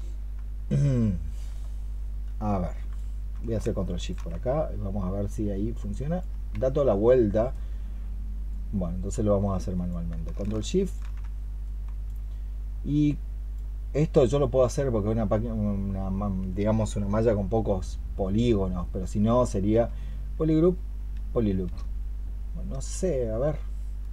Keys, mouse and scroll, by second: 3.9 ctrl+shift+click, 6.4 ctrl+z, 10.0 ctrl+z, 10.7 ctrl+shift+click, 19.8-21.5 space, 23.9 space.